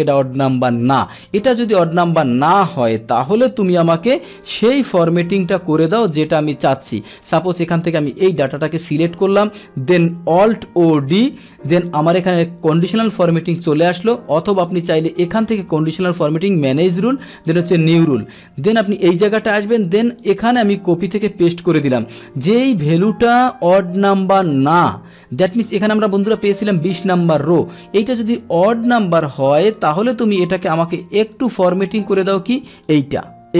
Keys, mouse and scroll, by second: 2.1 click, 3.2 ctrl+c, 3.7 Escape, 3.7 ctrl+c, 4.5 click, 5.5 Left, 5.9 Left, 6.4 Left, 6.9 Left, 7.3 right click, 8.6 ctrl+shift+Down, 8.8 ctrl+shift+Right, 12.7-13.6 drag, 14.6 click, 15.3 click, 16.2 click, 17.5 click, 18.9 click, 20.1 click, 21.3 ctrl+v, 29.7 click, 31.4 click, 32.7 click.